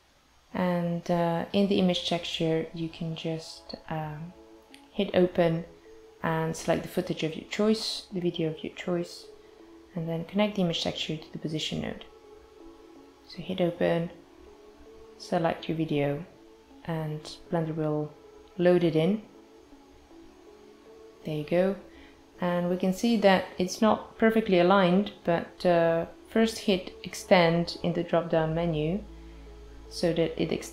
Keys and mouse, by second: 0.2 ctrl+t, 0.8 click, 1.7 shift+a, 4.4 click, 7.0 click, 7.5 click, 9.6 click, 12.2 click, 12.8 click, 23.9 click, 29.2 space, 29.6 space.